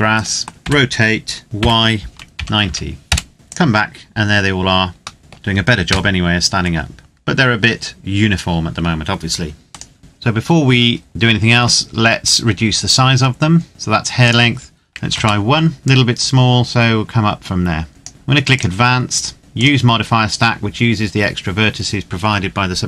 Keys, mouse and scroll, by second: 0.5 r, 1.4 y, 2.0 KP_9, 2.3 KP_0, 2.8 KP_Enter, 3.3 click, 5.0 middle click, 5.6 KP_0, 7.0-7.9 scroll up 1, 7.9-9.4 scroll down 1, 9.4 right click, 10.0-12.2 scroll up 1, 13.9 click, 14.7 KP_1, 14.8 KP_Enter, 15.8 click.